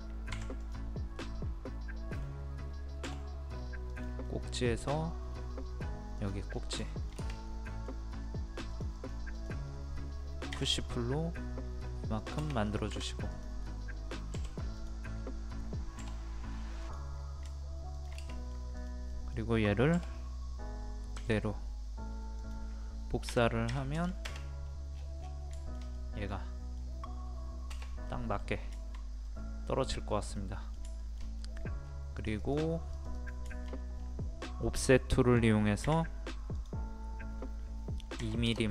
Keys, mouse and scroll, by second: 0.3 Escape, 0.6 click, 1.2-2.5 middle drag, 3.0 m, 3.9 click, 4.3 middle click, 4.9 scroll up 1, 6.2 click, 6.5 scroll down 1, 6.9 shift+middle click, 8.1-8.7 scroll up 1, 8.7 click, 10.5 p, 10.8 click, 12.9 Escape, 13.3 click, 14.3 Delete, 14.8 click, 15.1 scroll up 1, 16.0 typing, 16.8 click, 17.9 shift+click, 18.3 middle click, 18.8 click, 19.1 middle click, 21.1 ctrl+click, 23.7 KP_3, 24.6-25.0 scroll down 1, 25.0 scroll up 1, 25.2-25.6 scroll down 1, 25.6 shift+middle click, 25.9 scroll up 1, 25.9 middle click, 29.2 scroll up 1, 29.2 middle click, 29.9 scroll up 1, 30.4 middle click, 30.8 scroll down 1, 31.0 shift+middle click, 31.8-32.2 scroll up 1, 32.2 click, 33.5 shift+middle click, 34.0-35.9 scroll up 1, 35.9 o, 36.5 click, 38.2 KP_2.